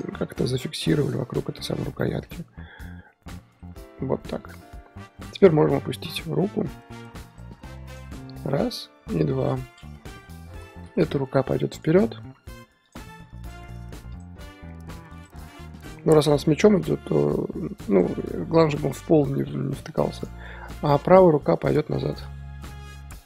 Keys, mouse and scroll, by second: 0.1 scroll down 3, 0.2-3.6 middle drag, 3.6 scroll up 1, 3.8-4.4 scroll down 5, 4.4 KP_1, 5.4 click, 5.6-5.9 scroll up 4, 6.0 r, 8.0 click, 8.2 r, 10.1 KP_3, 11.1 r, 13.0 click, 13.1 r, 14.2 click, 14.4 r, 15.5 r, 16.0-16.5 scroll down 4, 16.7 r, 18.6-20.2 middle drag, 20.2 click, 20.6 KP_3, 21.5 scroll up 3, 22.0 r.